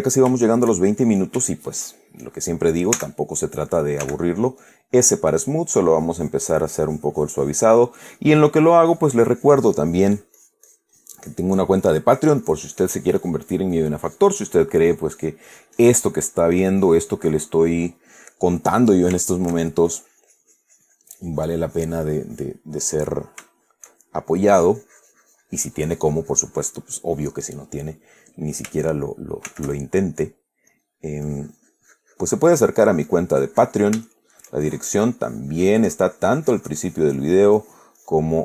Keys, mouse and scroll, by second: 0.0 click, 0.7-1.8 shift+drag, 1.9 shift+click, 3.3 s, 4.3 f, 4.9 click, 5.7 click, 7.2-17.9 drag, 18.0-19.4 drag, 19.4-20.0 shift+middle drag, 20.2-22.9 shift+drag, 23.0-23.6 middle drag, 23.8-24.8 shift+middle drag, 24.9-27.3 shift+drag, 29.8 shift+f, 31.0 click, 31.5-34.3 drag, 34.4-34.9 shift+middle drag, 35.7-38.4 drag.